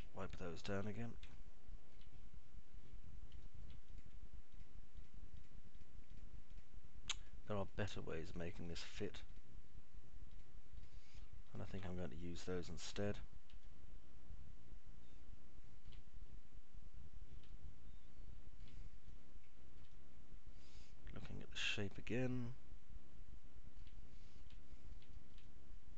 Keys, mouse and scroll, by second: 0.0 alt+middle click, 0.8 middle click, 1.2-2.0 alt+middle drag, 2.3-3.0 alt+middle drag, 4.7 alt+middle click, 5.0 click, 5.7 ctrl+click, 7.2 ctrl+click, 7.7 ctrl+click, 9.3 ctrl+click, 10.3 ctrl+click, 11.3 ctrl+click, 12.7 ctrl+click, 13.8 Delete, 14.8-17.0 alt+middle drag, 18.7-19.8 alt+middle drag, 20.2-25.0 middle drag, 25.3 middle click, 25.8 alt+middle click.